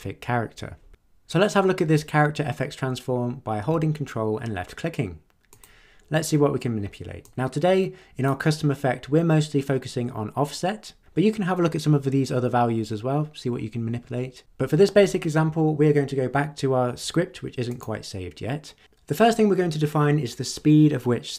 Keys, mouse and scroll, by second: 5.5 ctrl+click, 7.2-8.4 drag, 17.6 click.